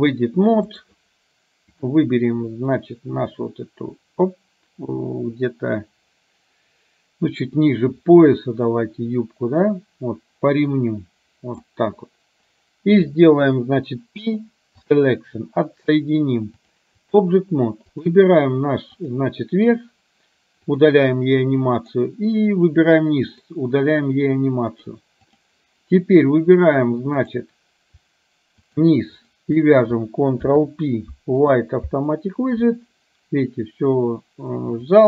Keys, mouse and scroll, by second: 0.8 click, 2.8-11.7 drag, 14.3 p, 16.7-17.3 drag, 17.9 click, 19.0 click, 20.8 click, 21.9 click, 23.4 click, 27.2-27.5 drag, 28.8 shift+click, 29.2 shift+click, 30.4 ctrl+p, 34.8 click.